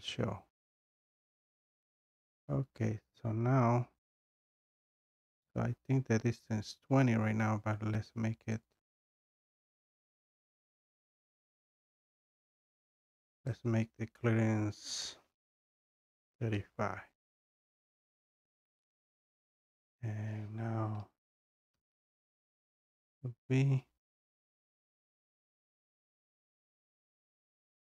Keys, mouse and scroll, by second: 0.4 scroll, 0.9-1.5 scroll, 1.9 scroll, 2.8-3.2 scroll down 2, 4.6 scroll up 2, 5.6 scroll up 1, 6.0-6.6 scroll, 6.6-7.2 scroll, 8.7 click, 8.8 click, 11.1 click, 11.3 click, 11.3 scroll down 2, 14.2 click, 16.1 3, 18.0 click, 21.8 b, 23.6 scroll, 26.7 scroll down 1, 26.8 scroll, 26.9-27.9 scroll down 1.